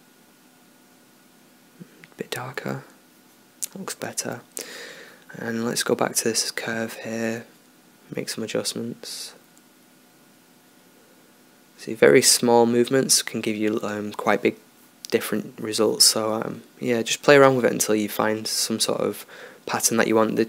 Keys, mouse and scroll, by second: 1.6 click, 5.7-7.4 middle drag, 7.4 click, 9.9-12.6 drag, 12.6 middle click, 13.5 click, 13.6-15.0 middle drag, 15.0 click, 15.1 middle click, 16.0-17.3 drag, 19.5-20.4 middle drag.